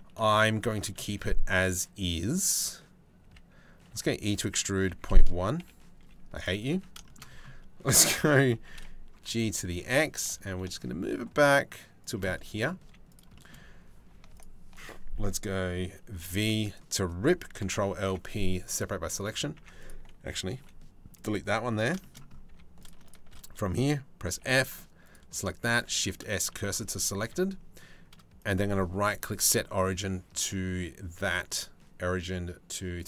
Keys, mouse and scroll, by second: 0.5 middle click, 2.8 a, 3.5 e, 5.2 KP_7, 5.6 z, 6.3 a, 6.6 shift+middle click, 8.2 g, 11.9 middle click, 12.4 z, 13.0 shift+middle click, 15.8 v, 17.2 ctrl+l, 17.7 p, 19.2 Tab, 20.2 Delete, 20.8 click, 21.3 Tab, 21.7 middle click, 22.1 2, 22.7 shift+click, 23.9 f, 24.7 click, 25.4 shift+s, 26.8 Tab, 28.1 click, 28.8-29.8 right drag, 29.8-32.7 drag.